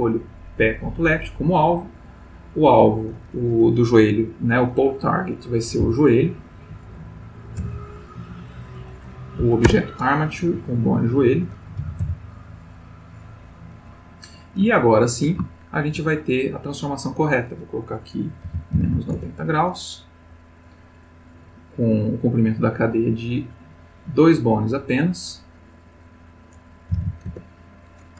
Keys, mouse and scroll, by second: 0.6 click, 2.6 click, 5.7 j, 5.8 o, 7.6 BackSpace, 9.4 Down, 9.6 Return, 10.9 click, 11.8 j, 12.0 o, 12.7 click, 14.7-15.4 ctrl+middle drag, 15.5-16.1 ctrl+shift+middle drag, 16.9 click, 18.4 -, 18.7 9, 18.8 0, 19.1 Return, 22.9 click, 23.5 click, 26.0 click, 26.9 9, 27.0 0, 27.3 Return.